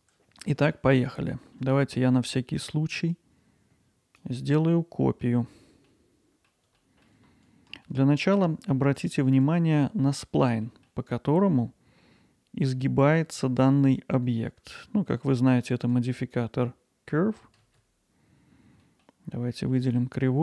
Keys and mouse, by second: 2.2-2.6 alt+middle drag, 3.2-4.2 drag, 4.6 alt+middle click, 5.9 middle click, 6.1 alt+middle click, 6.7 shift+d, 7.4 alt+middle drag, 7.9 middle drag, 8.5-10.0 middle drag, 10.6 middle click, 14.1 Tab, 15.8 Tab, 17.6 alt+z, 18.8-19.9 middle drag.